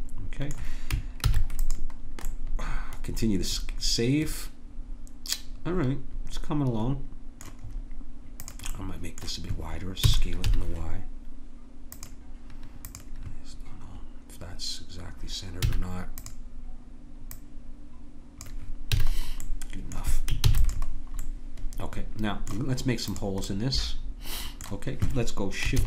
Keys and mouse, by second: 1.2 ctrl+s, 3.6 click, 7.7-10.2 drag, 10.1 s, 15.6 a, 19.0 a, 20.4 ctrl+s, 23.1-25.6 drag, 25.7 shift+a.